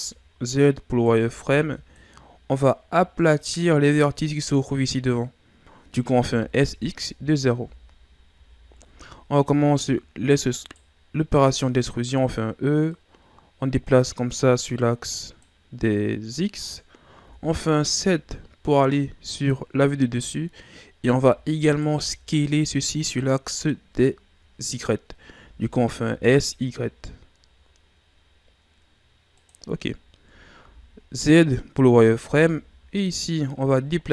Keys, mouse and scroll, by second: 0.9 right click, 1.3 b, 6.2 s, 8.3 z, 9.1-9.7 ctrl+scroll up 2, 9.7 e, 12.9 click, 16.0-17.2 scroll down 2, 17.2 KP_7, 21.6 alt+right click, 25.4 s, 29.8 scroll down 1, 30.0-30.5 ctrl+scroll up 1, 30.6 z, 31.9 right click, 32.2 b, 33.3 scroll down 1, 33.6-34.1 ctrl+scroll up 2.